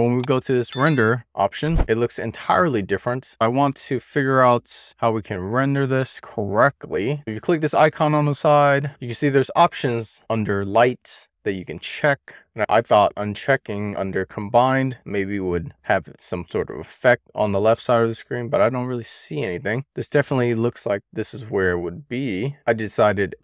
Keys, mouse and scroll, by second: 0.2 middle click, 0.8 click, 3.3-4.7 middle drag, 10.1 click, 13.6 click, 15.2 click, 21.1 click, 22.5 click.